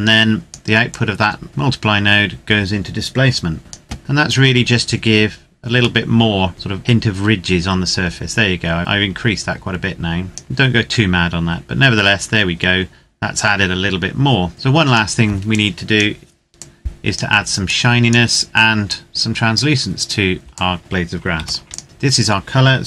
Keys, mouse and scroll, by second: 0.6-0.9 scroll up 1, 0.9 click, 4.0-5.7 scroll up 1, 5.9 shift+middle click, 6.0 shift+middle click, 6.7 click, 7.5 click, 9.9 click, 10.9-14.5 scroll down 1, 14.5 click, 15.7 click, 16.7 click, 17.9 click, 19.1 click, 20.7 click, 21.3 ctrl+s, 21.7 click.